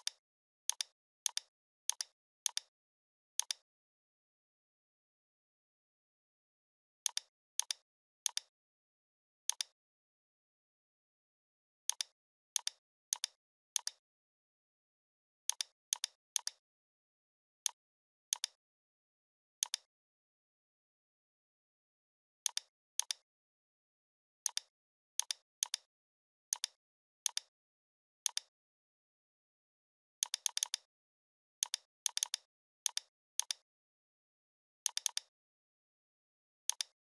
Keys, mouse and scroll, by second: 1.0 scroll up 1, 1.2 space, 1.3 click, 1.5 space, 1.9-2.4 click, 2.2 space, 2.5 click, 4.7-5.1 typing, 5.8 Return, 7.0-11.0 drag, 14.2 right click, 14.3 right click, 15.5 click, 16.3 space, 16.4 click, 16.6-17.0 space.